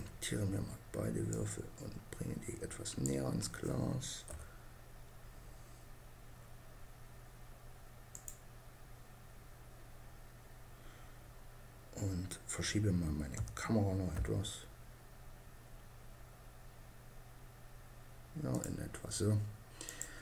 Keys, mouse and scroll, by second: 0.9-2.4 drag, 3.7 KP_0, 7.7-9.3 right drag, 12.7 g, 18.1-19.2 right drag.